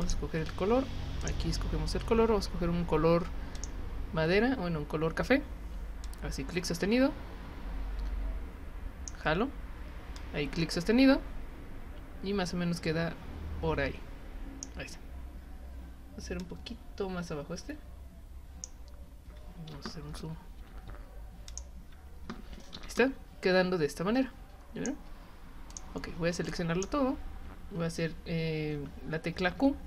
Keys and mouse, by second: 0.0 click, 1.2 click, 3.5 click, 6.0-9.1 drag, 10.2-14.6 drag, 16.4 click, 21.5 click, 23.0-24.8 drag, 25.7 click, 26.5 click.